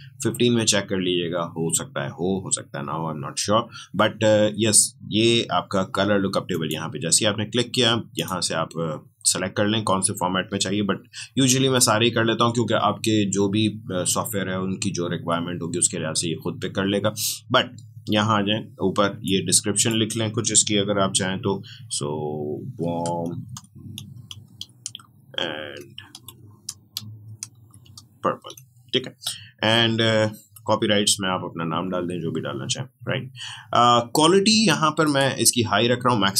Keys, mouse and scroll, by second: 6.5 click, 19.2-22.2 drag, 22.3 click, 22.7-23.2 typing, 25.7-27.8 typing, 35.0 click.